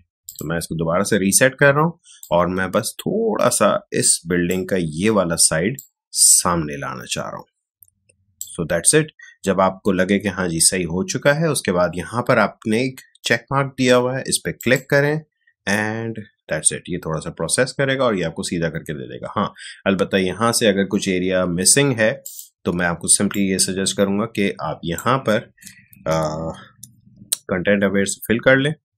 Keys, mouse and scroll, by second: 14.5 click, 22.2-26.3 drag, 26.3 shift+BackSpace, 27.0 Return.